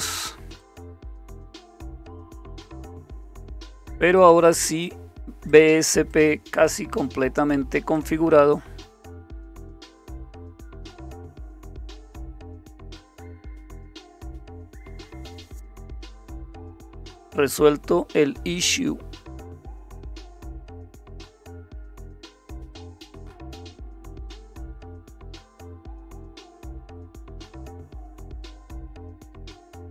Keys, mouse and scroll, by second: 0.6 click, 3.1 click, 4.2 click, 5.5 click, 7.9 click, 13.5 click, 21.1 click, 24.1 shift+super+q, 29.1 click.